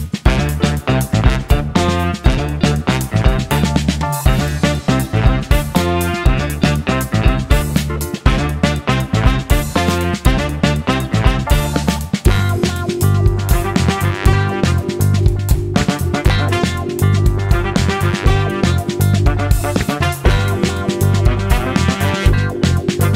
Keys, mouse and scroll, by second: 1.3 click, 8.0-9.2 drag, 11.0 shift+click, 12.8 ctrl+g, 13.8 click, 14.3 click, 15.9 ctrl+shift+g, 16.7 click, 18.0 click, 19.9 ctrl+d, 22.8 click.